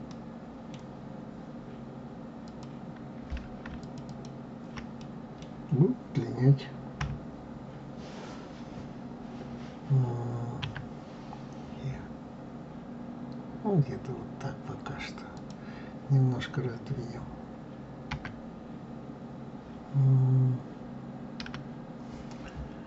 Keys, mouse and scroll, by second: 0.0 middle click, 0.9-2.4 scroll up 2, 2.4 click, 3.8 shift+click, 4.0 shift+click, 5.0-6.9 middle drag, 6.9 KP_3, 10.6 e, 18.1 s.